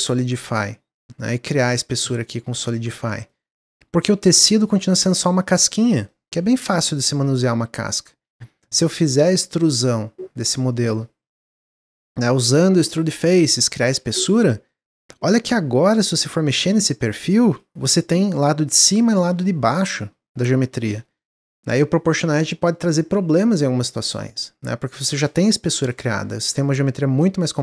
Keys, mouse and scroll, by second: 1.7 Tab, 1.9 scroll down 2, 2.2 middle click, 2.5 Tab, 2.9 middle click, 3.1 scroll up 1, 3.2 shift+middle click, 3.6 Tab, 4.9 click, 5.4 click, 5.9 middle click, 6.5 click, 7.2-9.4 middle drag, 9.4-10.9 drag, 11.2 a, 12.0-13.8 drag, 14.0 Tab, 14.2 middle click, 14.4 scroll up 2, 14.6 shift+middle click, 15.0 Tab, 16.3 2, 16.5 click, 17.4 3, 17.5 click, 17.9 click, 18.2-21.3 middle drag, 21.3 g, 24.8-27.2 middle drag, 27.2 ctrl+z, 27.5 ctrl+z.